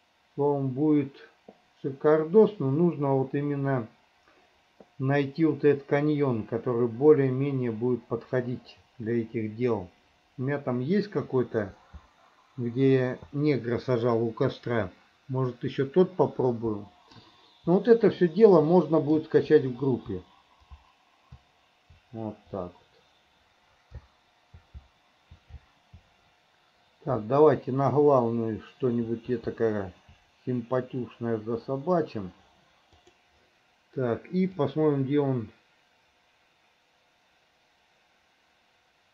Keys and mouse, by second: 34.7-39.1 drag.